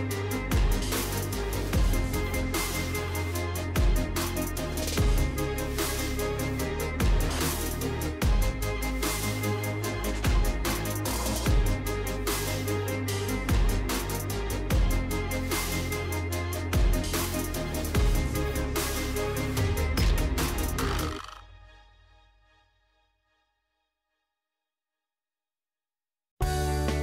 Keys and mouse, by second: 3.4 middle click, 5.0 Tab, 6.3 1, 7.2 click, 11.7 KP_Decimal, 12.0 Tab, 13.5 Tab, 13.7 middle click, 15.0 click, 16.1 g, 18.3 Tab, 18.6-19.8 middle drag, 19.9 Tab, 20.7 click, 21.9 g, 23.4 Tab, 23.7-25.0 drag, 25.3 Tab, 25.8 click.